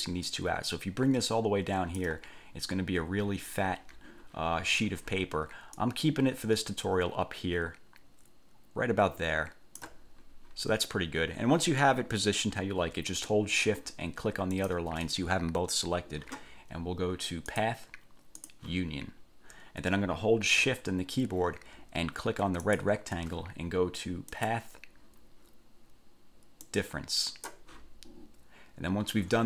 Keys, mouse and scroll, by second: 0.4-2.4 ctrl+drag, 6.0-10.2 ctrl+drag, 14.7 shift+click, 17.7 click, 18.6 click, 22.8 shift+click, 24.5 click, 26.8 click.